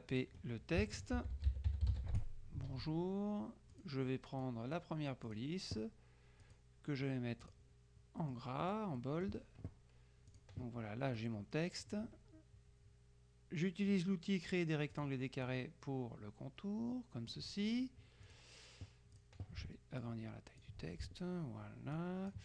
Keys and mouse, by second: 1.0-2.4 typing, 3.8 click, 6.5 click, 7.4 click, 8.3-9.3 middle drag, 10.3 click, 11.2-12.5 drag, 15.1 click, 18.4 click, 19.3 click, 20.1-21.2 ctrl+drag, 22.1 click.